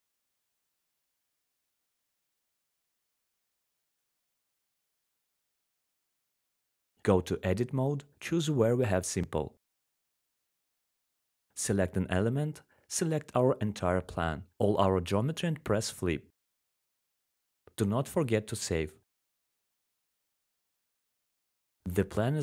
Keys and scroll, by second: 0.0-1.3 typing, 11.0 f, 14.2-15.8 typing, 19.9-21.7 typing.